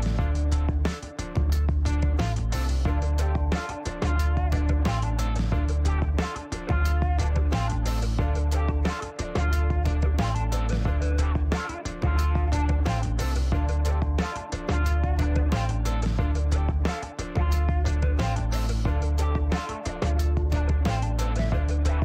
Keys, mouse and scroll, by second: 1.0 click, 3.3-4.9 typing, 5.7 Return, 6.9-8.1 drag, 8.3-8.9 scroll up 2, 9.1 middle click, 10.5 click, 11.6 Delete, 13.6-14.6 drag, 15.0 click, 16.5 click, 17.6 click, 19.4 KP_2, 20.0 ., 20.1 ,, 20.3 KP_5, 20.7 Return, 21.5 scroll down 2.